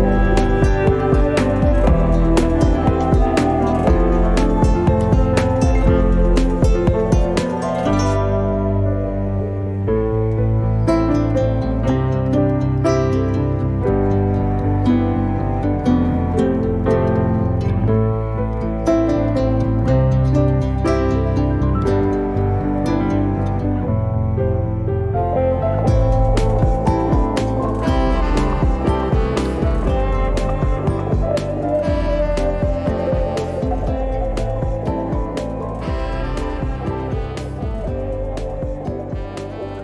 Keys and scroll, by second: 4.2 space, 6.3 f, 9.1 0, 9.4 KP_Decimal, 9.6 5, 10.1 Return, 11.4 Escape, 12.3 space, 13.8 e, 26.7 space, 28.3 f, 30.1 3, 30.5 Return, 32.3 l, 34.3 space, 36.3 f, 37.5 0, 37.7 KP_Decimal, 37.9 5.